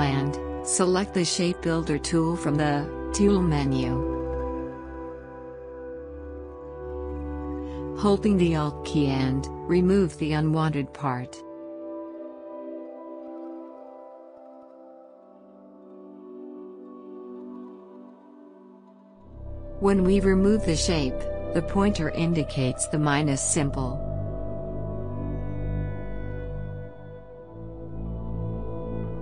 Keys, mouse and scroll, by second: 2.1 click, 4.8-12.7 alt+drag, 12.7 ctrl+z, 13.3-27.1 alt+drag.